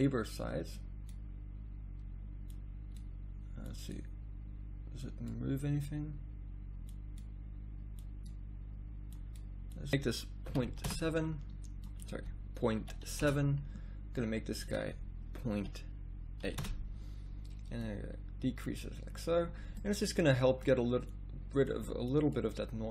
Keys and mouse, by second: 10.9 d.